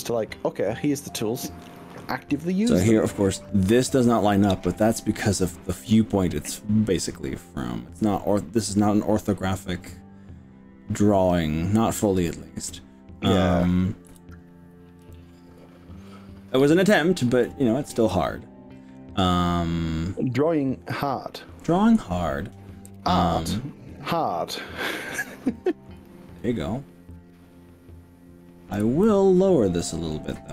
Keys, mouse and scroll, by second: 0.7-1.2 scroll up 2, 1.7 scroll down 1, 12.7 middle click, 14.1 KP_1, 15.0 KP_3, 16.1-17.4 shift+middle drag, 23.5-25.1 middle drag, 25.6 middle click, 27.2-28.8 drag, 29.2 middle click.